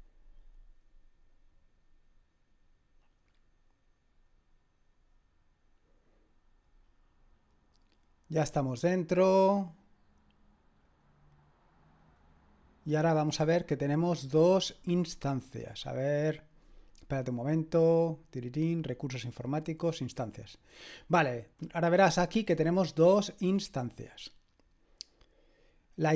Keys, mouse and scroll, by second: 10.8 click, 12.0 click, 13.1 click, 18.8 click, 20.4 click.